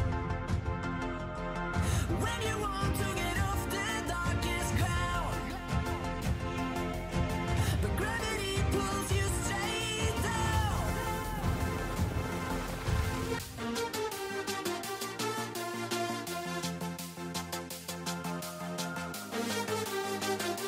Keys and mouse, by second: 0.2 a, 1.9 a, 3.4 a, 3.5 a, 8.1 a, 8.3 a, 8.7 k, 11.1 a, 11.1 click, 11.2 z, 11.4 click, 11.4 z, 12.3 ctrl+z, 14.8-15.1 drag, 15.2-16.1 middle drag, 16.1 a, 16.2 a, 17.0 middle click, 17.6-19.9 typing.